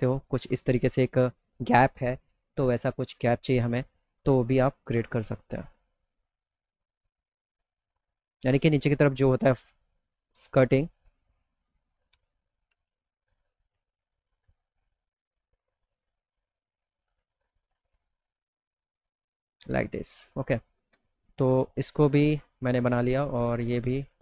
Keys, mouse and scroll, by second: 2.0 click, 3.0 middle click, 3.1 middle click, 3.4 alt+middle click, 4.2 t, 4.5 F3, 5.0 middle click, 5.2 middle click, 5.3 middle click, 5.5 middle click, 5.8 middle click, 6.1 middle click, 7.9-9.8 drag, 10.3 click, 10.4 right click, 10.8 middle click, 11.1 middle click, 11.8 middle click, 12.1 z, 12.4 alt+middle click, 12.9 middle click, 13.1 middle click, 13.3 alt+middle click, 13.9 middle click, 14.0 middle click, 14.8 middle click, 15.2 middle click, 15.8 click, 16.4 middle click, 16.5 middle click, 17.4-19.0 drag, 19.3 click, 19.6 middle click, 19.9 middle click, 20.7 click, 21.2 click, 21.7 middle click, 22.2 click, 23.4 click, 23.7 click, 24.0 middle click.